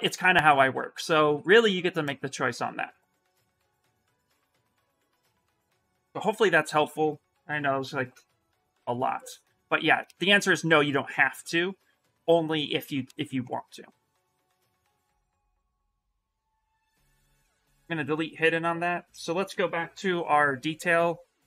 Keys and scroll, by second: 16.6 2, 18.9 s, 19.7 b.